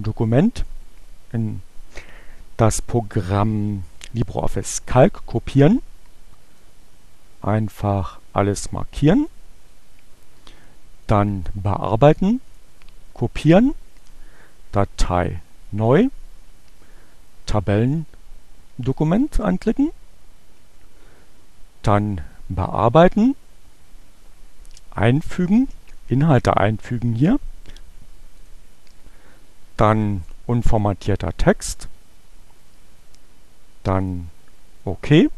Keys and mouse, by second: 6.3-9.5 drag, 11.0 click, 12.2 click, 14.0 click, 17.5-19.2 drag, 21.5 click, 27.6-28.6 drag, 30.2 click, 34.1 click.